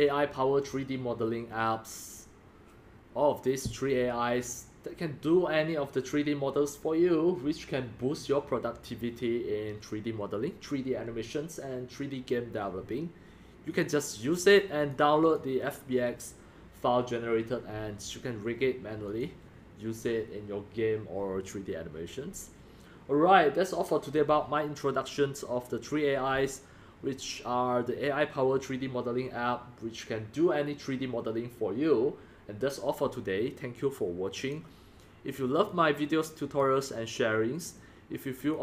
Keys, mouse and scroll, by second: 2.6-3.0 drag, 13.8 click, 14.9 click, 15.2 click, 15.9-19.8 drag, 34.5 click, 34.9 click, 36.4 click, 37.3 drag, 37.7-38.4 drag.